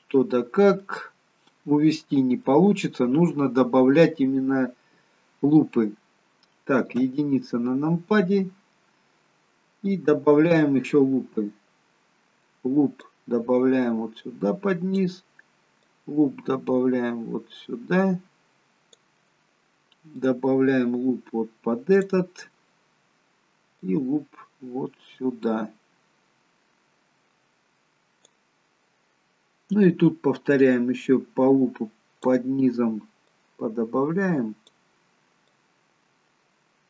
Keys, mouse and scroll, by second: 1.0 middle click, 6.9 KP_1, 8.6-9.1 scroll up 1, 9.1-9.8 scroll down 1, 13.0 click, 15.9 click, 20.2 click, 23.7 click, 29.8 click, 33.4 click, 35.6 click.